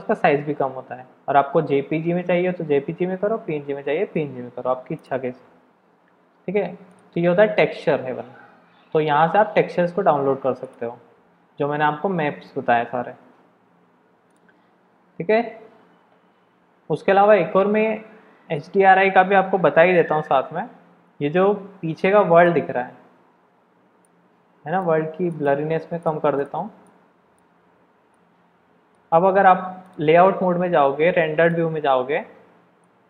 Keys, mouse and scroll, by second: 29.8 click, 31.7 click, 32.8 middle click.